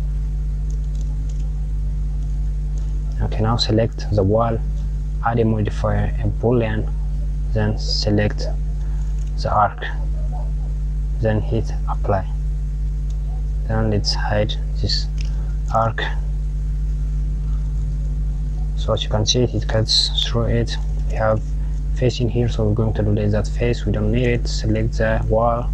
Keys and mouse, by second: 4.9-7.4 drag, 7.8 click, 12.0-14.0 drag, 15.8 click, 16.5 KP_Add, 17.8 click, 23.3 click, 24.3 click, 25.5 Tab.